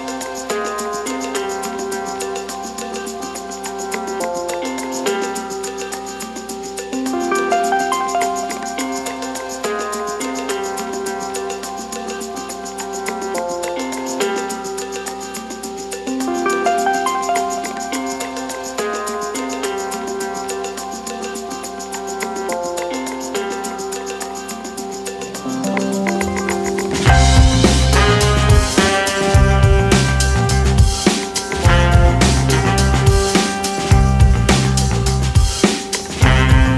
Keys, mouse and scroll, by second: 0.4 alt+e, 7.7-11.3 middle drag, 11.3 2, 11.9 click, 13.4 click, 14.7 click, 15.5 g, 20.3-21.7 middle drag, 21.7 g, 28.1 g, 35.8-36.7 middle drag.